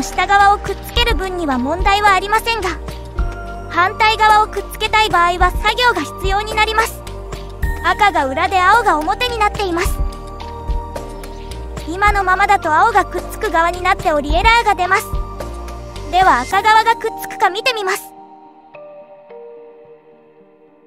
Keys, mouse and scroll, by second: 2.9 click, 3.3 click, 3.7 g, 4.6 click, 5.2 g, 8.0 r, 10.3 g, 11.1-12.4 middle drag, 12.4 scroll down 1, 12.7 click, 12.9 click, 13.7 shift+click, 13.9-16.0 right drag, 16.0 click, 16.8 click, 19.4 click, 20.3 click.